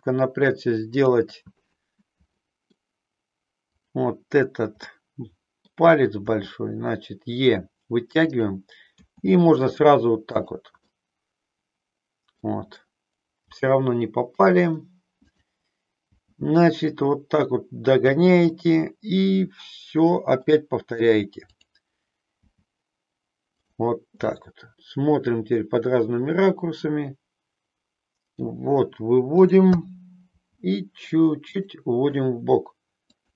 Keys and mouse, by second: 0.9 click, 2.5 middle click, 3.8 click, 4.8-5.8 middle drag, 6.2 e, 8.5 click, 8.9 e, 10.8-12.5 middle drag, 13.5 g, 14.5 click, 15.2 click, 16.2 g, 17.9 click, 18.6-20.5 middle drag, 21.5 click, 22.5 g, 23.7 click, 24.3-28.5 middle drag, 29.3 click, 30.3 g, 32.9 click.